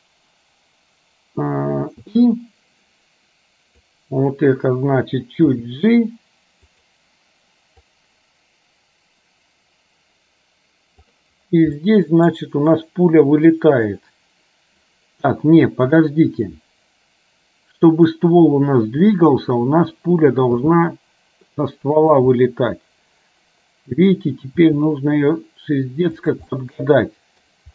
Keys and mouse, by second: 4.0 click, 5.6 g, 8.1-11.4 drag, 11.9 shift+middle click, 16.6-18.2 drag, 20.6 g, 22.4-24.2 middle drag, 24.7 g, 26.6 middle click.